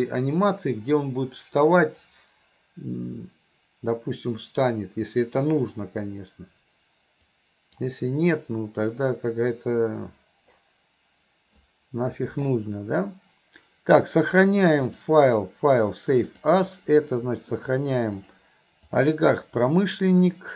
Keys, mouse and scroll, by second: 7.3-7.8 drag, 16.6 click.